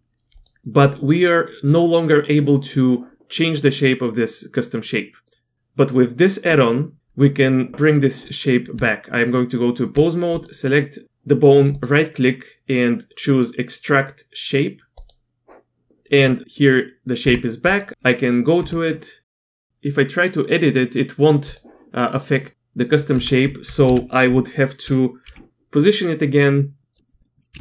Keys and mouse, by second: 0.3 click, 4.1-5.3 middle drag, 8.7 Tab, 10.4 click, 11.8-15.1 drag, 16.5 click, 17.2 Tab, 18.5 Tab, 19.7 g, 23.1 Tab, 23.8 KP_1, 25.2 g, 27.0 click, 27.2 drag, 27.5 g.